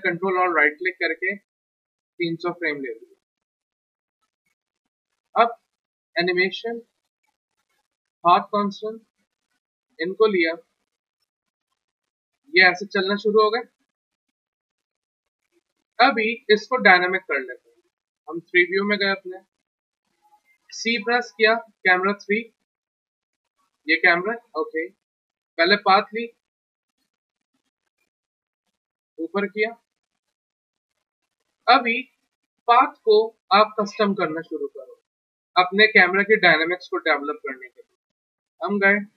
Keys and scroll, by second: 20.7 c, 32.6 1.